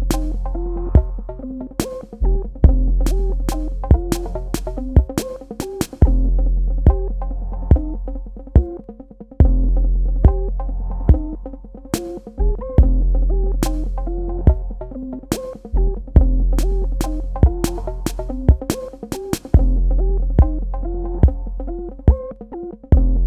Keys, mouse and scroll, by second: 9.0-9.6 scroll up 1, 9.6 click, 11.0-11.6 scroll up 1, 13.7 click, 19.2 right click, 20.0 click, 23.0 ctrl+click.